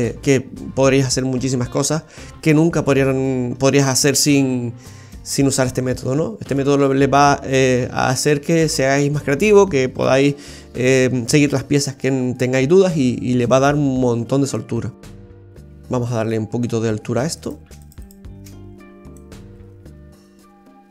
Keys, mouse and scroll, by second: 5.3-6.4 scroll down 1, 6.4 scroll down 2, 6.5 shift+middle click, 10.6-11.1 scroll up 2, 11.1-12.0 scroll down 1, 12.7 scroll up 2, 13.4 middle click, 15.6 Tab, 15.9-16.3 scroll up 2, 16.3 middle click, 17.4 right click, 17.8 alt+shift+right click, 19.1 click.